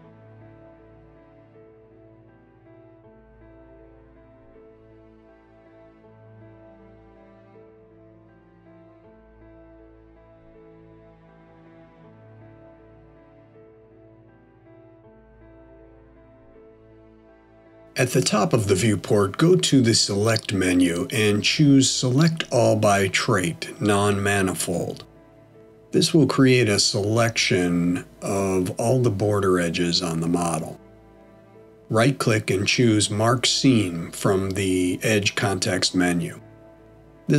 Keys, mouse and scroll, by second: 0.2 middle click, 2.3 f, 3.7 click, 4.4 shift+click, 5.7 f, 6.9 click, 7.6 click, 8.6 f, 9.7 click, 10.4 click, 11.4 f, 12.6 click, 13.5 scroll down 1, 14.1 middle click, 19.1 click, 21.6 click, 31.9 right click, 36.6 middle click.